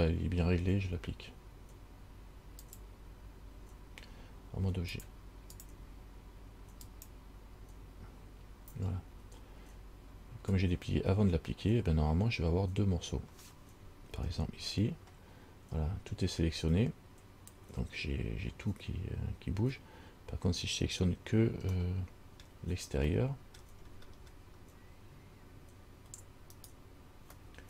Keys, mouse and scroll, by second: 2.8 click, 5.1 click, 7.0 click, 14.3 Tab, 22.0 middle click, 23.3 middle click, 24.0-24.5 scroll up 3, 26.8 alt+right click.